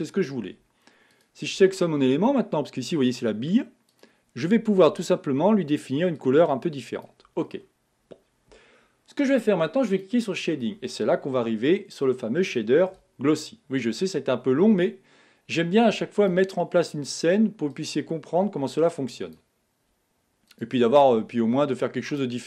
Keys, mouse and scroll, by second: 1.1 click, 4.1 click, 10.2 click, 18.3-20.7 drag.